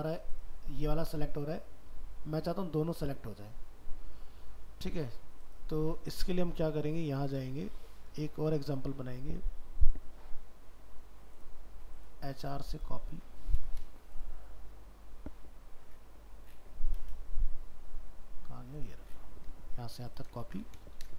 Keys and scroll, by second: 20.5 ctrl+c.